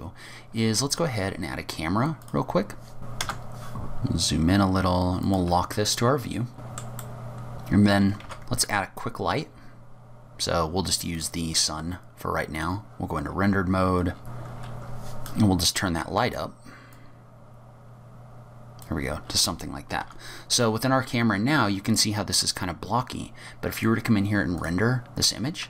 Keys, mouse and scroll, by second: 0.4 scroll down 1, 0.8 shift+a, 3.0 KP_0, 3.3 n, 3.5 click, 3.7 click, 3.9-5.0 scroll up 1, 5.3 click, 5.7 middle click, 6.6 middle click, 6.7 shift+middle click, 6.8 click, 6.9 scroll up 29, 7.1 shift+middle click, 7.2 shift+middle click, 7.3 middle click, 8.3 shift+a, 12.7 click, 13.3 scroll down 5, 14.1 scroll down 9, 14.3 scroll up 3, 14.3 KP_0, 14.4 scroll down 2, 14.5 click, 14.6 Delete, 14.6 click, 14.8 g, 15.0 click, 15.2 click, 16.9 click, 20.0 KP_0, 23.8 click.